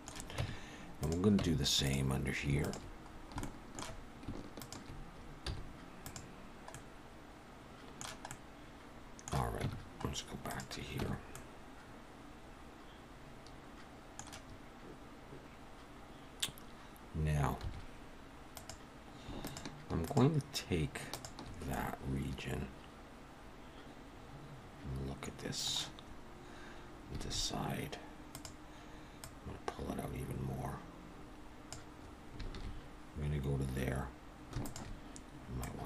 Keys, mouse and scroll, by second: 0.4 Tab, 0.9 click, 1.4 Tab, 1.8 click, 2.6 shift+click, 3.1-3.4 scroll down 2, 3.4 shift+middle click, 4.6 shift+click, 5.4 x, 6.7 middle click, 8.3 middle click, 9.6 Tab, 10.0-10.5 scroll up 3, 10.5 click, 11.0 Tab, 11.3 middle click, 17.8 2, 18.5 click, 19.4 shift+click, 20.0 click, 21.1 click, 21.7 middle click, 27.2 alt+a, 28.3 click, 30.1 click, 32.5 alt+a, 34.6 alt+shift+click, 35.6 click.